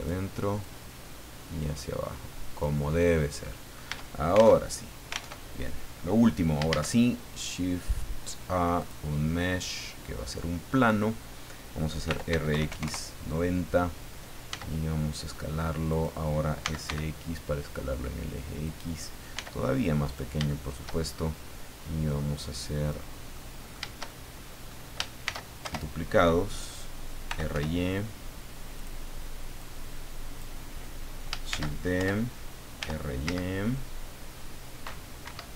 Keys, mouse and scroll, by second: 0.6-2.8 drag, 2.9 scroll down 2, 3.4 middle click, 3.9 Tab, 5.3 alt+Tab, 6.1 scroll down 2, 6.7 shift+a, 8.8 click, 9.4-9.8 scroll down 2, 11.8-12.8 typing, 12.8 KP_Enter, 14.5 s, 15.9 click, 16.6 s, 16.9 x, 18.6 click, 19.3 s, 20.1 click, 20.5 shift+middle click, 21.1-21.4 shift+scroll up 1, 22.0 click, 23.3 middle click, 24.1 shift+middle click, 25.2 shift+d, 25.6 shift+Return, 27.0-28.0 typing, 28.8 click, 29.6 click, 31.4 shift+d, 32.0 shift+Return, 32.8 r, 33.2 z, 35.2 Escape.